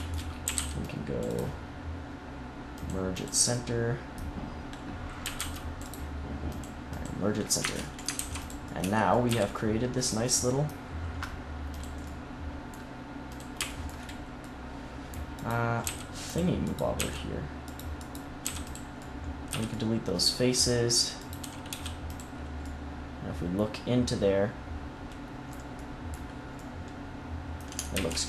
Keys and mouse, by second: 0.4 a, 0.5 c, 2.7-5.2 drag, 5.2 a, 5.3 c, 6.4 click, 7.5 Tab, 8.1 ctrl+s, 8.7 Tab, 9.2 z, 13.6-15.3 drag, 15.8 x, 16.9 x, 18.4 x, 19.4 z, 21.6 x, 27.9 ctrl+z.